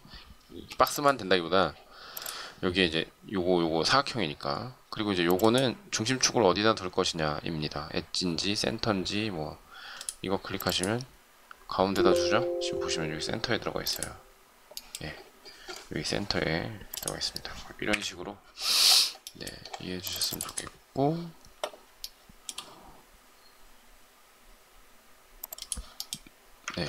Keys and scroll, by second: 0.4 space, 17.7 Delete, 26.7 ctrl+z.